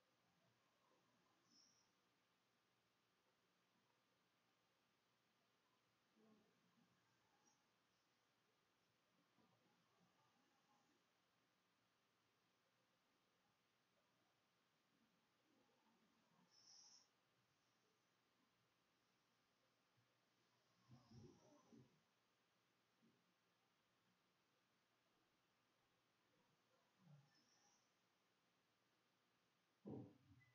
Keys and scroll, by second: 0.0-8.9 typing, 10.6 b, 11.0 Left, 11.2 Down, 11.9 Right, 12.8 Down, 13.0 space, 14.0 space, 14.7 /, 14.8 Up, 15.7 shift+Return, 15.8 shift+\, 15.9 shift+=, 23.3 ctrl+x, 23.5 ctrl+c, 24.4 d, 29.1 ctrl+z, 29.2 ctrl+x, 29.6 ctrl+f, 29.8 ctrl+v.